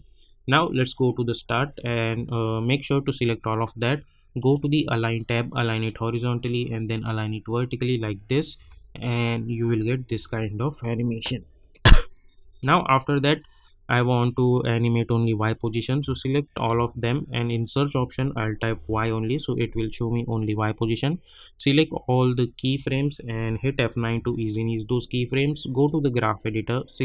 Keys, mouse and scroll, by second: 1.7-2.2 scroll up 2, 4.4 click, 8.6 space, 12.5 space, 12.6 click, 14.9 scroll up 1, 16.6 ctrl+a, 17.7 click, 18.7 y, 20.4-22.9 drag, 24.0 F9, 25.7-27.0 drag.